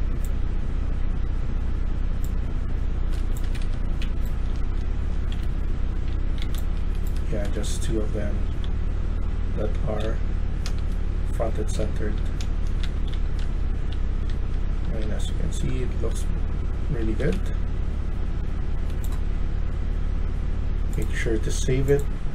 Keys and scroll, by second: 3.3 Escape, 3.5 Escape, 3.7-7.9 typing, 9.7-17.4 typing.